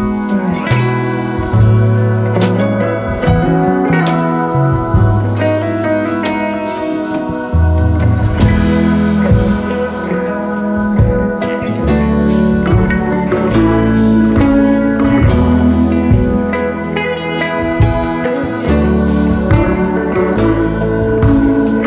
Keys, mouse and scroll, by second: 0.9-5.0 drag, 5.0-6.2 scroll up 1, 6.2-9.8 drag, 11.8 click, 12.4-13.8 drag, 13.8-14.4 scroll up 4, 14.4-18.8 drag, 18.8-19.3 scroll up 1, 19.3-21.8 shift+drag.